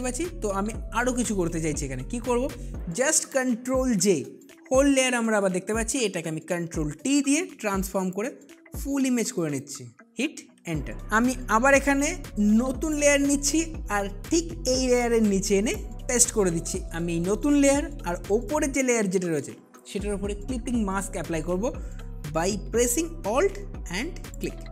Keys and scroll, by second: 6.8 ctrl+t, 7.6 ctrl+shift+t.